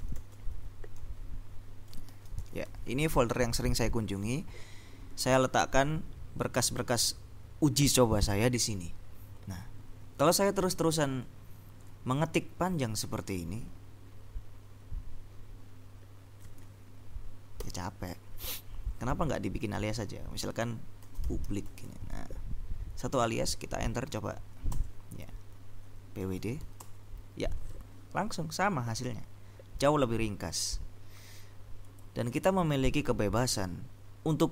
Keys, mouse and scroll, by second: 0.0-3.2 typing, 17.7 ctrl+u, 20.9-22.7 typing, 24.8 Return, 26.0-27.2 typing, 30.0-31.3 drag, 31.9 click.